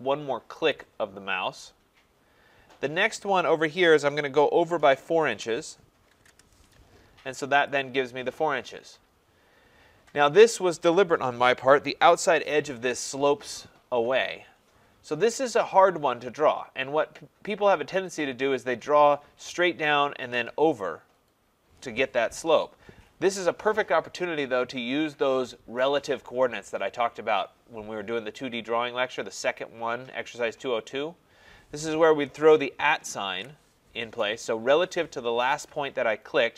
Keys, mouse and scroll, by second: 0.7 click, 5.4 4, 6.1 shift+', 6.3 Return, 7.7 click, 9.5 scroll, 32.3 scroll, 33.3 @.